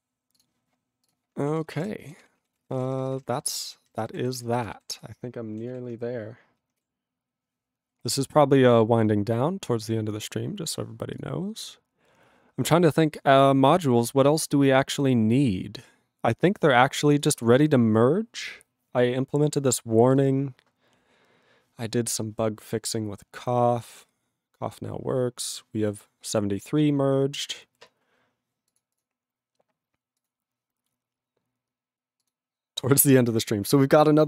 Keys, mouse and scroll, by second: 1.1 q, 1.6 ctrl+a, 1.7 ctrl+space, 1.7 ctrl+e, 1.8 ctrl+g, 2.2 ctrl+s, 2.4 ctrl+a, 2.5 ctrl+space, 2.7 ctrl+e, 2.7 ctrl+n, 2.9 ctrl+e, 3.0 ctrl+n, 3.1 ctrl+g, 3.2 ctrl+n, 3.2 ctrl+e, 3.3 ctrl+n, 3.4-4.1 ctrl+n, 4.4 ctrl+s, 4.5 ctrl+space, 4.9 ctrl+alt+b, 5.0 ctrl+g, 5.6 ctrl+g, 5.7 ctrl+s.